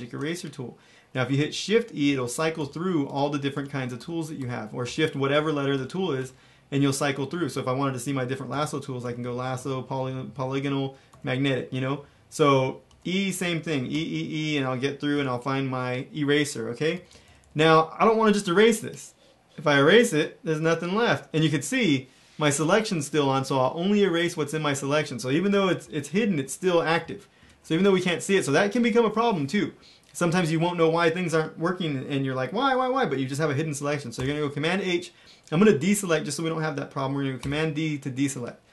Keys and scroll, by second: 2.0 shift+e, 2.5 shift+e, 3.0 shift+e, 12.9 e, 13.4 e, 13.9 e, 15.1 e, 16.9 ], 17.1 ], 17.2 ], 17.4 ], 27.5 super+z, 34.1 super+h, 37.3 super+d.